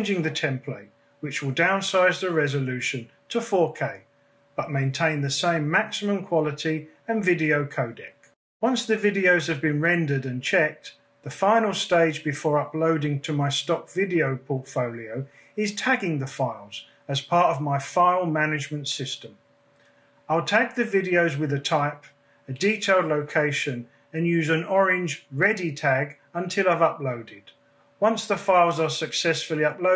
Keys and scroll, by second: 5.6 BackSpace, 5.8 4.